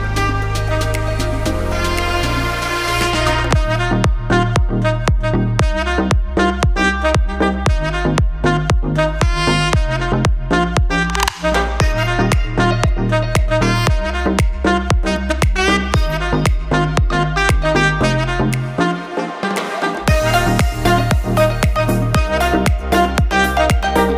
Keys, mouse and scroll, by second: 0.5 scroll up 1, 0.8 shift+middle click, 2.0 middle click, 5.7 shift+middle click, 9.4 click, 13.3 middle click, 15.1 click, 15.6 middle click, 18.1 middle click, 19.2 shift+middle click, 20.3 middle click, 21.4 scroll down 1, 21.7 shift+middle click, 22.3 middle click, 23.3 shift+middle click.